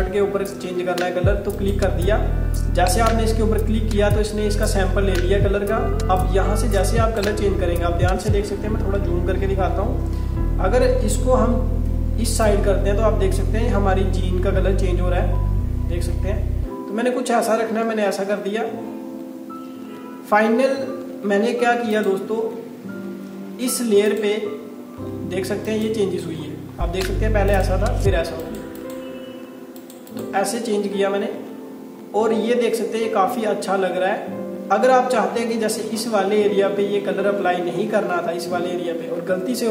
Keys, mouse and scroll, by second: 1.6 click, 6.2 click, 7.5-7.8 scroll up 1, 9.1-9.6 scroll up 1, 11.0-11.4 scroll up 1, 12.5 click, 18.0 scroll down 1, 18.9 alt+scroll down 1, 19.4 alt+scroll down 1, 20.6-21.1 alt+scroll down 1, 22.0 click, 26.5 scroll up 1, 27.6 click, 31.0 scroll down 1, 32.0 alt+scroll up 1, 32.8 alt+scroll up 1, 35.1 alt+scroll up 1, 37.4 alt+scroll up 1.